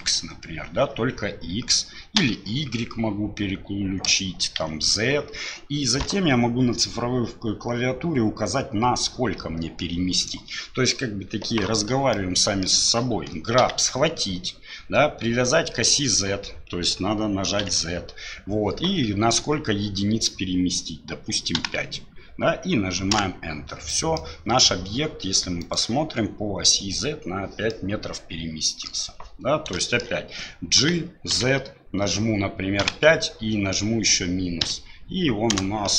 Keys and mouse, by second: 12.1 middle click, 13.6 g, 23.9 middle click, 25.6 click, 27.7-28.9 middle drag, 29.8 middle drag, 30.8 g.